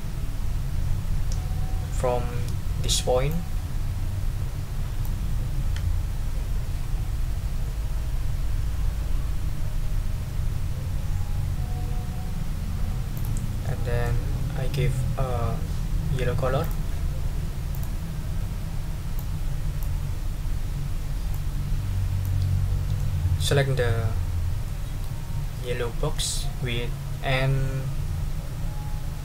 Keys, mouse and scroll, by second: 3.3-5.2 drag, 13.1 click, 13.6 middle click, 16.6 click, 17.7 click, 19.1 click, 21.3-22.4 drag, 23.0 middle click, 24.6 middle click, 24.8 click.